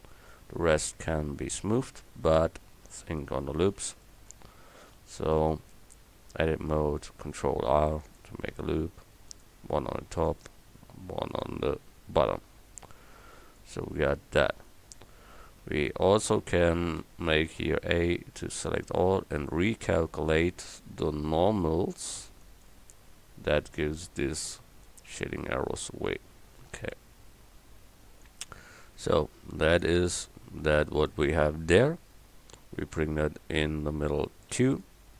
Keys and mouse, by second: 0.0 click, 1.0 Tab, 5.0 click, 5.8 Tab, 7.4 ctrl+r, 10.0 ctrl+r, 12.2 Tab, 14.9 Tab, 17.0 a, 17.5 a, 24.6 Tab, 27.0 KP_1, 31.8 KP_7.